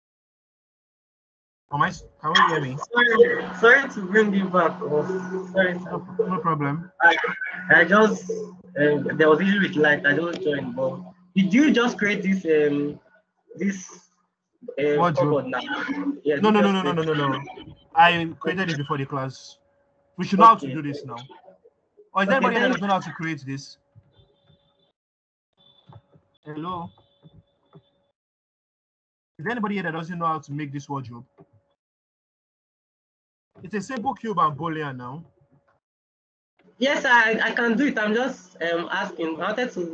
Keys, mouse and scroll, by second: 2.3-5.0 scroll down 2, 11.4-12.8 scroll down 2, 12.8-13.6 scroll down 1, 13.6 middle click, 17.8-21.0 scroll down 2, 27.5 KP_1, 27.5 KP_3, 32.6 middle click, 32.6-37.0 scroll down 1, 37.7-39.9 middle drag, 37.7-39.9 scroll down 2.